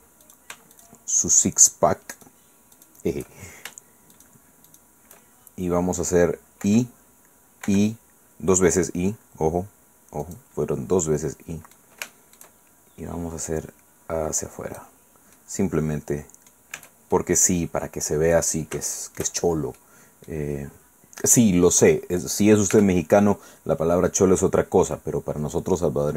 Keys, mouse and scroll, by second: 0.2 shift+right click, 1.3 shift+right click, 2.1 shift+right click, 4.1 shift+right click, 6.6 i, 7.6 i, 10.2 click, 10.5-11.0 scroll down 1, 11.0 click, 12.0 shift+middle click, 12.1 shift+click, 12.5 shift+middle click, 12.8 shift+scroll up 1, 13.5-15.0 drag, 15.3-16.7 drag, 16.7 Tab, 17.1-18.6 drag, 18.6 shift+middle click, 18.9 shift+click, 19.4 shift+middle click, 19.8 click, 20.5-21.0 scroll down 2, 21.0-21.8 scroll up 2, 22.7 Tab.